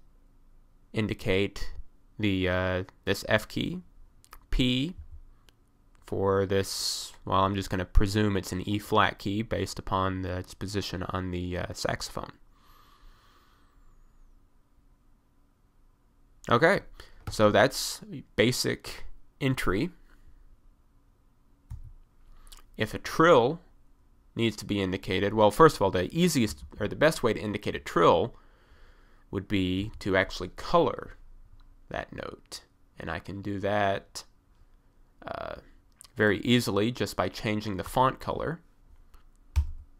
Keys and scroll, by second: 5.0 p, 21.8 1, 26.5 f, 26.7 d, 29.8 s, 39.6 j.